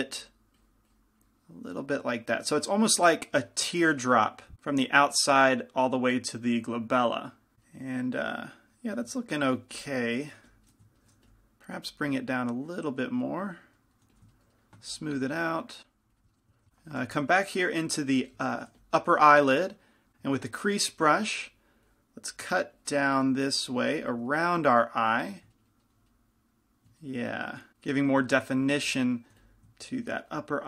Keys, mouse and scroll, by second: 2.6-10.9 middle drag, 9.8-12.0 typing, 12.5-14.3 drag, 14.3 f, 15.1-17.4 drag, 17.4 middle click, 17.4 shift+c, 17.4 f, 18.7-20.0 middle drag, 18.9 f, 20.0 click, 20.1 ctrl+z, 20.1 f, 20.8-25.8 drag, 24.5-27.6 middle drag, 29.0 f, 29.6 f, 30.3-30.6 drag.